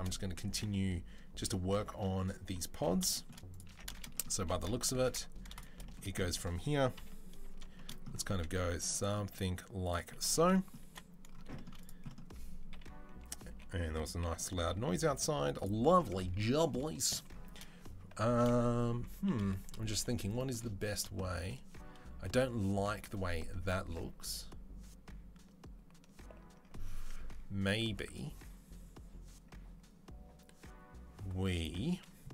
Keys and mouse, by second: 3.5 Tab, 4.2 3, 6.8 KP_3, 8.1 e, 10.2 1, 10.7 2, 12.5 KP_3, 13.3 g, 19.1 KP_3.